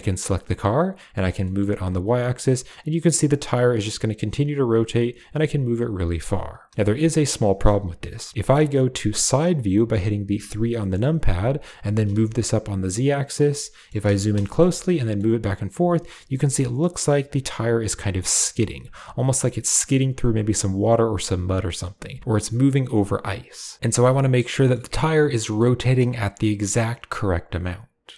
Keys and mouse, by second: 0.2 click, 1.0 g, 6.7 middle click, 10.3 KP_3, 11.7 g, 13.4-13.7 shift+middle drag, 14.3 shift+middle drag, 24.4 g.